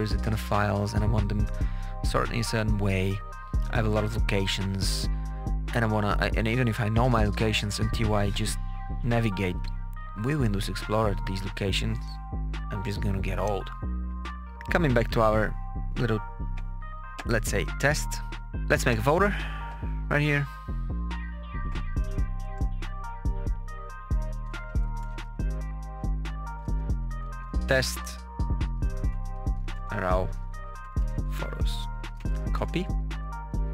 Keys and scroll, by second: 24.6-27.5 typing, 28.6-33.0 typing.